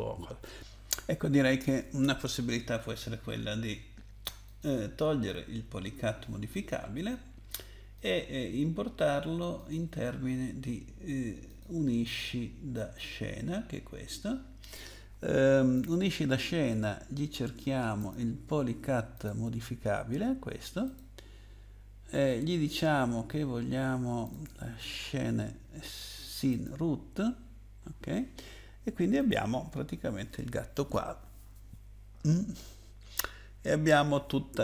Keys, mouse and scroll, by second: 2.8 right click, 4.5 click, 6.5 click, 8.0 click, 9.6 click, 11.5 click, 12.7 right click, 15.7 click, 18.0 click, 19.1 click, 20.8 click, 24.2 click, 26.5 click, 29.2 click.